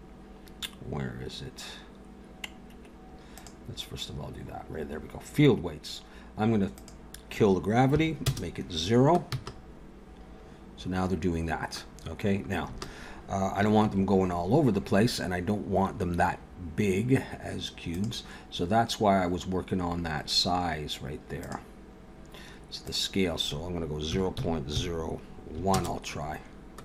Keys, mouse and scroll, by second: 3.3 click, 3.9-4.6 scroll down 3, 4.8 scroll down 1, 5.8 scroll down 1, 6.8 click, 9.3 space, 12.7 space, 13.9 ctrl+s, 17.9 click, 19.3-20.6 scroll up 2, 21.3 click, 22.0 scroll down 2, 22.9 click.